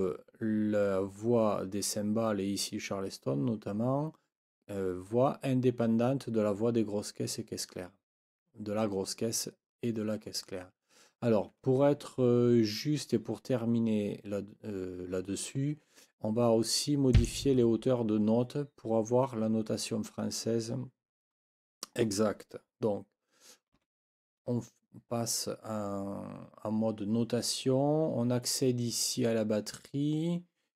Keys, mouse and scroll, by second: 17.1 click, 23.7 n.